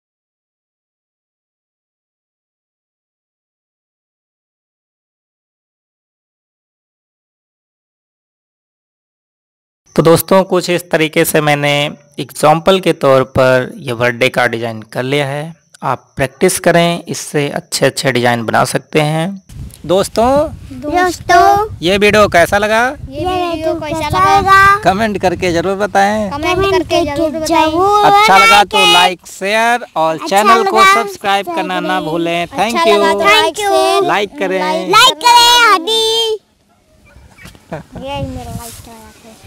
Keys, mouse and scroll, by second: 0.7 click.